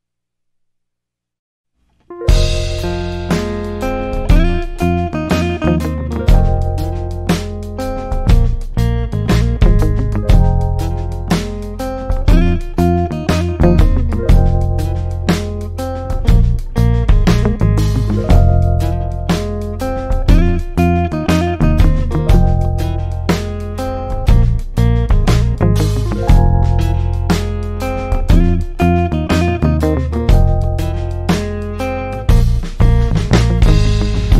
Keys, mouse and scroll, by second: 24.8-34.3 drag.